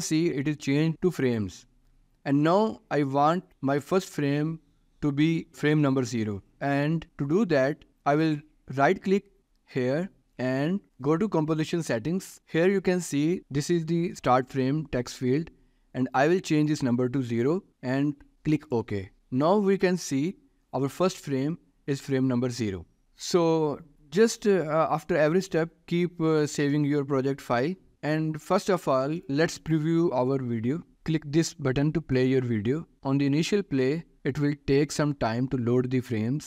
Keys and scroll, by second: 17.7 0, 23.0 ctrl+s.